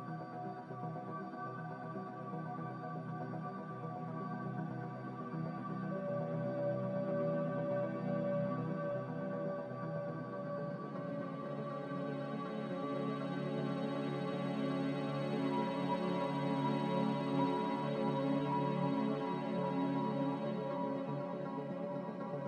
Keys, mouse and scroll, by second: 8.4 z, 10.9 5.